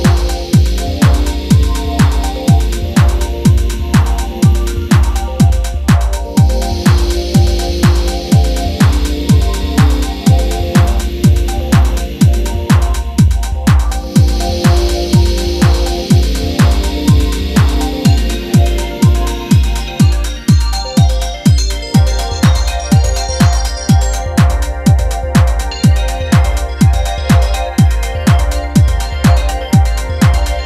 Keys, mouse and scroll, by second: 0.0-6.2 typing, 7.4-20.3 typing, 16.6 ctrl+z, 21.3-30.6 typing.